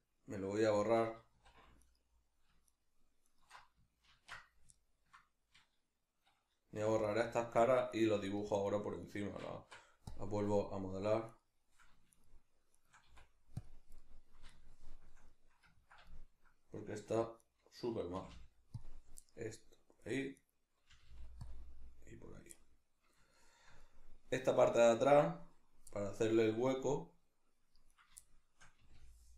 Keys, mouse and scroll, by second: 1.3 2, 1.8 alt+right click, 2.7 alt+shift+right click, 3.3 alt+shift+right click, 4.1 ctrl+x, 4.7-7.1 ctrl+middle drag, 6.8 3, 7.1 right click, 7.6 shift+right click, 7.9 shift+right click, 8.3 shift+right click, 8.5 shift+right click, 9.1 shift+right click, 9.5 x, 10.7-11.3 middle drag, 11.3 right click, 12.1 shift+right click, 12.7 shift+right click, 13.1 x, 14.0-17.4 middle drag, 17.1 1, 17.4 right click, 18.1 g, 18.9 click, 19.3-20.4 middle drag, 20.4 right click, 20.9 g, 21.5 click, 22.5-27.9 middle drag, 27.9 right click, 28.2-29.3 shift+middle drag, 28.8 g.